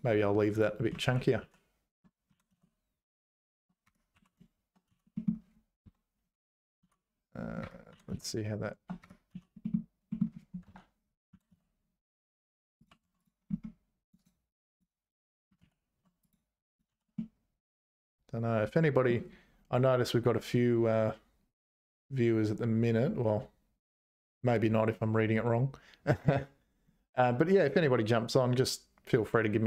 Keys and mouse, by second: 1.0 ctrl+z, 1.4 ctrl+z, 2.3 g, 4.1 2, 4.9 c, 6.8 c, 7.9 g, 9.3 c, 11.3 g, 13.0 Tab, 14.0 click, 14.2 right click, 15.6 ctrl+z, 16.7 click, 16.9 h, 17.2-19.1 middle drag.